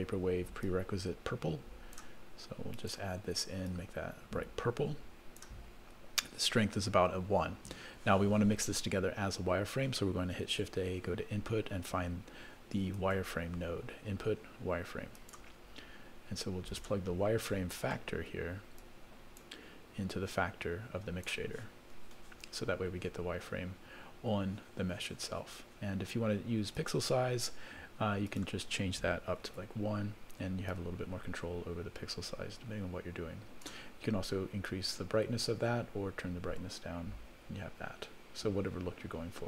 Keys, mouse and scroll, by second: 0.6-2.5 drag, 2.8 click, 10.5 shift+a, 13.0 shift+a, 17.4 middle click, 18.8 click, 20.1-21.8 drag, 22.7-23.4 scroll up 3, 23.4 scroll down 2, 24.1-25.2 scroll down 1, 27.2 click, 28.3-29.9 drag, 30.7-33.7 drag, 34.6-39.4 drag.